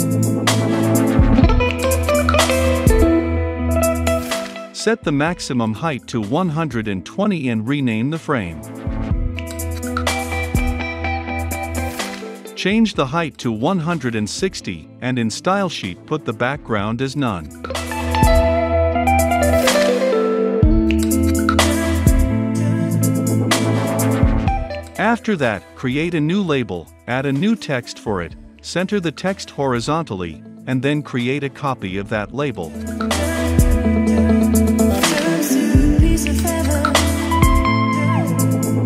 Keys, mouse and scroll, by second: 2.2 ctrl+z, 2.5-7.2 drag, 7.0-9.5 typing, 9.8 Return, 12.0 right click, 17.7-20.0 scroll up 2, 20.0 click, 20.0-22.6 typing, 23.1-24.2 drag, 24.2 a, 25.8-28.2 right drag, 28.1-31.2 typing, 31.4-34.4 drag, 34.4 middle click, 35.2-38.8 drag.